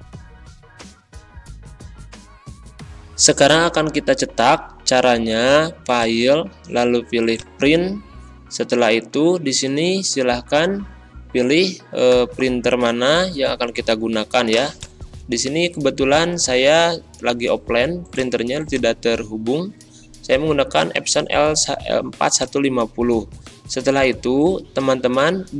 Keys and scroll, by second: 2.4 ctrl+[, 2.6 ctrl+], 2.8 ctrl+End.